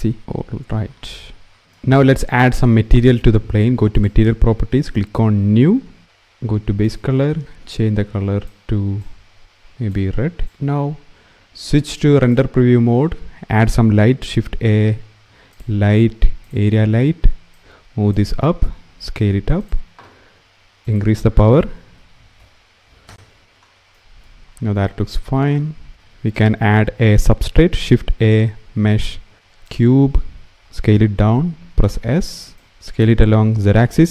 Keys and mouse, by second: 3.7 click, 4.5 click, 12.4 click, 13.8 shift+a, 17.3 click, 18.7 s, 20.7-22.8 drag, 22.8 KP_0, 23.4 s, 23.4 z, 23.4 g, 27.4 shift+a, 30.9 s, 34.0 s.